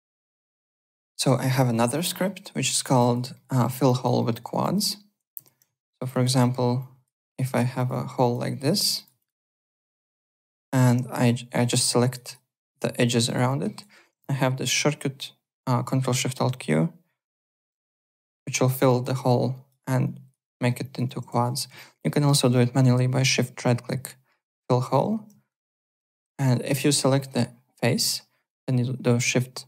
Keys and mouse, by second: 0.5 click, 0.8 alt+click, 1.7 alt+right click, 1.9 alt+middle click, 2.2 w, 2.7 alt+middle click, 2.9 alt+click, 3.3 alt+middle click, 3.6 alt+right click, 3.8 alt+click, 4.2 alt+middle click, 4.4 alt+right click, 4.6 alt+click, 5.0-5.8 typing, 5.8 alt+middle click, 6.0 alt+click, 6.3 alt+middle click, 6.8 alt+click, 7.2 alt+right click, 7.8 click, 8.0 Delete, 8.2 click, 8.3 Delete, 8.5 click, 8.6 Delete, 8.9 click, 9.1 Delete, 9.2 click, 9.4 Delete, 10.0 click, 10.1 Delete, 10.8 2, 11.1 alt+click, 11.6 click, 13.2 alt+click, 13.4 alt+middle click, 13.7 alt+right click, 17.4 ctrl+alt+shift+q, 18.0 alt+click, 18.8 alt+click, 19.5 alt+click, 20.8 alt+click, 21.3 ctrl+z, 23.1 shift+right click, 25.4 shift+right click, 25.9-26.9 typing, 27.2 click, 28.5 shift+right click.